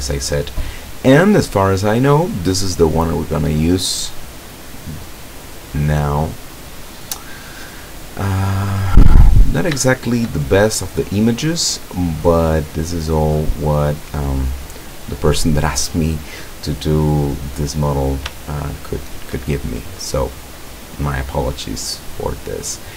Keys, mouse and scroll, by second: 2.7 click, 4.1 click, 5.3-5.6 scroll up 1, 6.0 scroll down 1, 6.8-7.9 middle drag, 8.2 middle click, 9.1-9.4 scroll up 1, 10.1 shift+middle click, 10.6-11.8 shift+middle drag, 13.1-14.4 middle drag, 15.4 scroll up 2, 17.6 scroll down 1, 18.6-19.6 shift+middle drag, 19.7 shift+middle click, 20.1 shift+middle click, 20.7 middle click, 21.0 middle click, 21.7-22.9 middle drag.